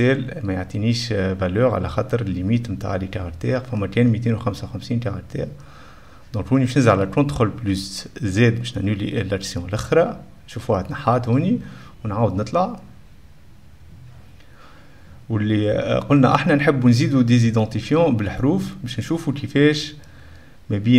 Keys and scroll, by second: 6.3-7.4 typing, 9.0 ctrl+z, 9.4 \, 9.5 Caps_Lock.